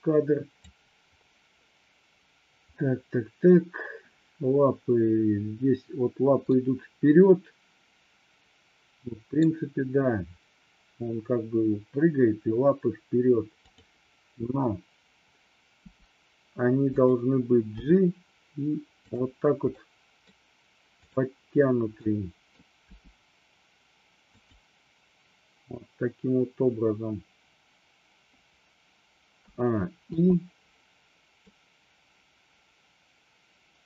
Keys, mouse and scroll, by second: 6.6-9.5 middle drag, 13.7-14.6 drag, 16.0 r, 17.9 g, 19.1 click, 19.9-20.4 middle drag, 21.1 click, 22.1-22.6 middle drag, 23.0 g, 24.5 click, 29.5 a, 30.2 i, 31.5-33.8 drag.